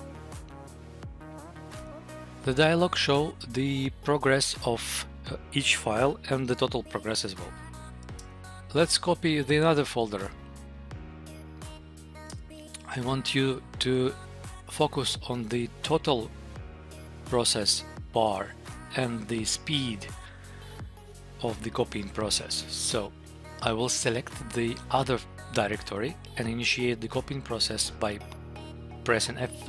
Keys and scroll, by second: 7.6 Tab, 7.8 Down, 8.0 Return, 23.1 Down.